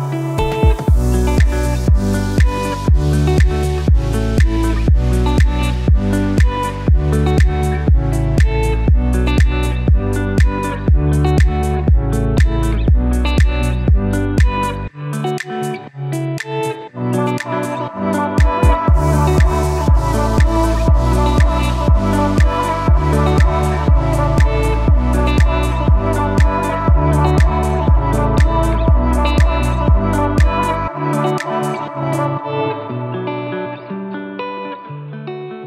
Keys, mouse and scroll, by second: 7.5 ctrl+Num_Lock, 8.1 ctrl+alt+2, 8.7 click, 16.9 click, 21.3 Return, 22.9 click, 23.0 click, 24.3 space, 24.7 s, 25.6 click, 32.2 click.